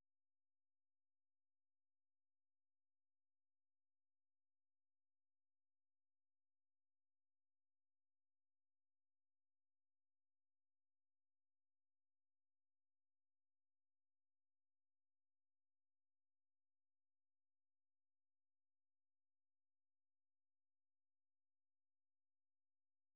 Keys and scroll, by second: 0.6 k, 1.0 k, 9.7-13.1 typing, 14.6-15.2 k, 16.5 k, 18.5 k, 19.2 k, 21.8-23.1 typing.